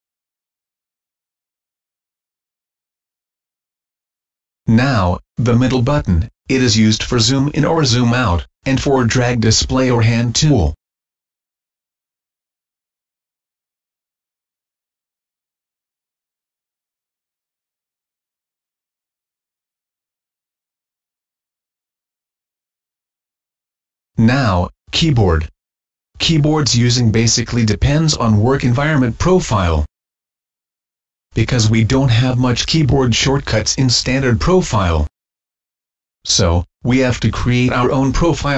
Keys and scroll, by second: 2.5 Delete, 24.9 ctrl+l, 29.8 ctrl+f, 34.3 Escape, 38.2 ctrl+g.